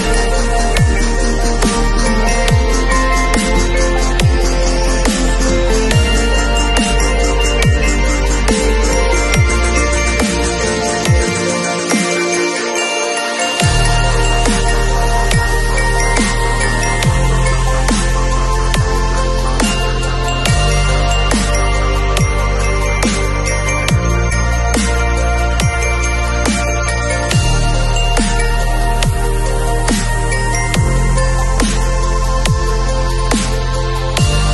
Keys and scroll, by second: 1.0 super+u, 11.9 super+u, 20.5 super+t, 26.7 space, 30.4 super+t.